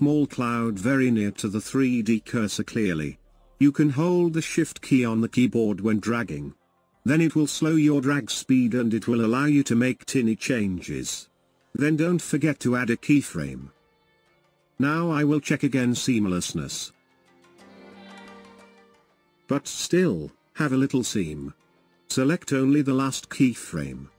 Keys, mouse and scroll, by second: 3.1 click, 3.1 right click, 3.4 click, 3.4 right click, 17.9-24.1 drag.